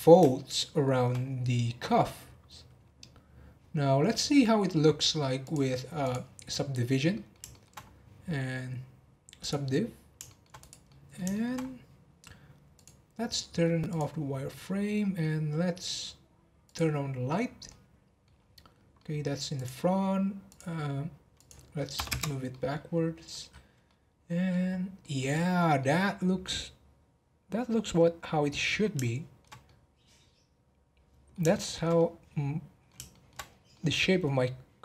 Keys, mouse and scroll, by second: 0.3-1.4 shift+middle drag, 1.4 scroll down 1, 5.4-7.1 drag, 7.1 middle click, 7.7 scroll up 4, 9.8 click, 10.2-10.6 shift+middle drag, 10.6 click, 10.8-11.6 middle drag, 11.6-12.7 scroll up 2, 12.7-14.5 drag, 14.5-15.4 middle drag, 15.4-16.7 scroll down 1, 16.7 click, 17.7 middle click, 18.3 scroll down 5, 18.9 middle click, 19.5 click, 20.5-22.5 drag, 22.5-22.9 middle drag, 22.9-23.3 scroll up 2, 23.3-24.6 middle drag, 24.6 scroll up 3, 25.0 middle click, 25.3-25.8 scroll up 2, 25.8-28.8 middle drag, 29.0-33.4 shift+middle drag, 33.4 scroll up 2, 33.7-34.8 middle drag.